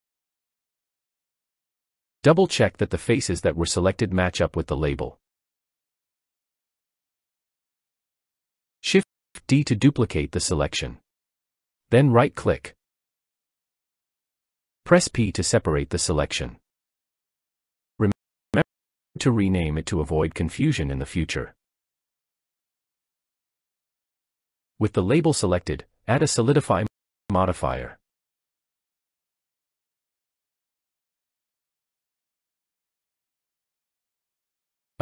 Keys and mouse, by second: 6.4 click, 9.8 shift+d, 14.1 p, 20.0 click, 20.6-22.1 drag, 26.3-29.6 drag, 30.1-32.1 middle drag.